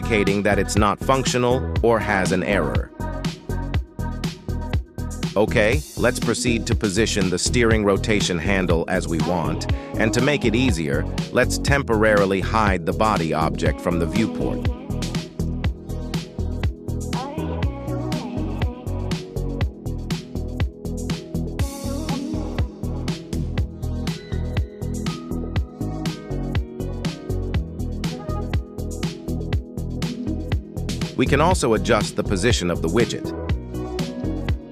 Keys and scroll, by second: 11.9 Tab, 12.6 shift+s, 14.8 Tab, 15.9 shift+s, 17.8 KP_3, 19.8 r, 22.4 g, 27.9 z.